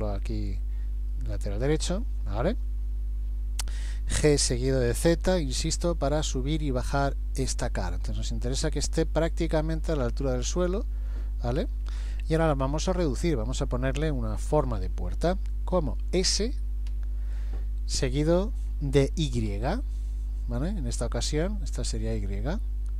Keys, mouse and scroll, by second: 0.2-0.9 scroll up 2, 1.2 shift+middle click, 4.2 g, 11.9-12.4 scroll up 2, 12.5 shift+middle click, 16.9 s.